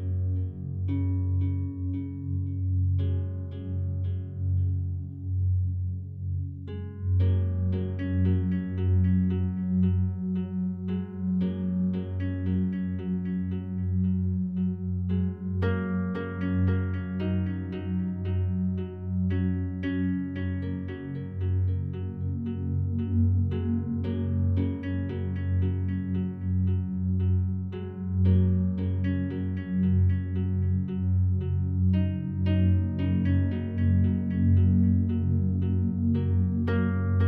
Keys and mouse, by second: 0.7 alt+click, 2.3 g, 2.7 z, 4.0 click, 5.4 i, 6.5 click, 6.5 typing, 7.4-9.5 drag, 10.2-10.5 typing, 11.8 shift+click, 12.7 click, 13.1-13.9 typing, 16.1-17.1 drag, 17.7-22.6 alt+drag, 22.7-23.9 drag, 24.1 typing, 25.5 shift+click, 26.4-28.7 drag, 28.8 typing, 30.9 typing, 32.5-34.6 typing, 33.5-35.2 drag.